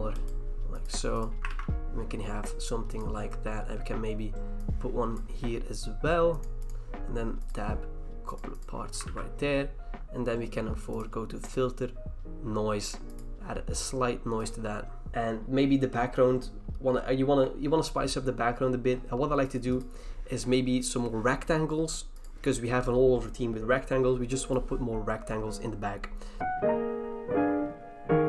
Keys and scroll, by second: 1.5 ctrl+d, 9.0 ctrl+d.